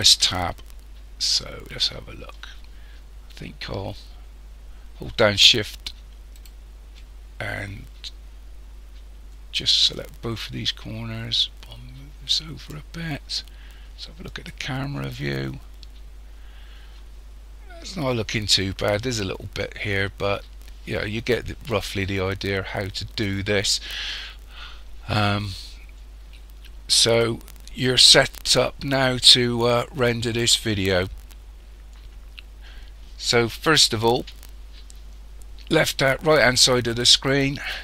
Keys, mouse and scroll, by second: 0.1 Tab, 1.4 scroll down 2, 6.4 shift+right click, 10.0 click, 14.3 click, 15.6-16.0 scroll up 3, 37.5 click.